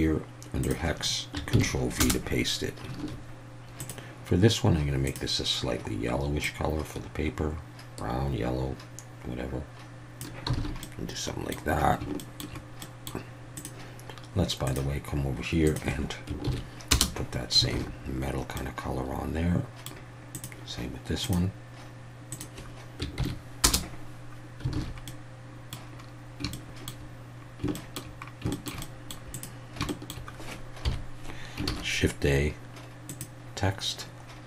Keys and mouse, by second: 3.0 alt+a, 3.8 click, 5.1 click, 10.6 alt+a, 10.8-11.5 middle drag, 12.2 shift+middle drag, 12.8 middle click, 13.6-14.8 drag, 17.7 alt+a, 18.6-19.8 middle drag, 20.4 click, 21.2 click, 24.8 alt+a, 25.1 middle click, 26.5-26.9 shift+middle drag, 27.7 shift+middle drag, 28.5 shift+middle drag, 28.8-29.1 middle drag, 29.9 shift+middle click, 30.8 KP_1, 31.7 shift+a.